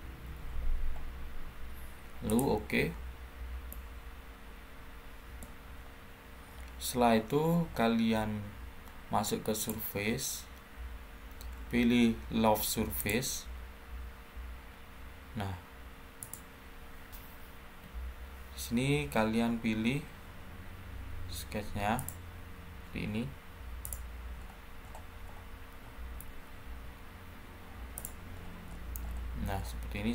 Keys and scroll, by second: 17.6 Delete.